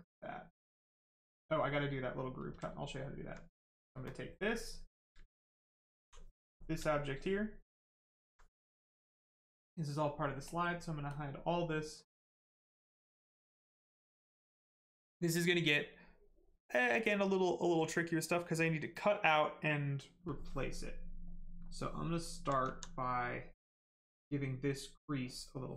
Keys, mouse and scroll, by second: 3.0 click, 4.0 ctrl+click, 5.5 alt+click, 7.0 alt+click, 10.4 click, 20.8 right click, 22.1 alt+right click.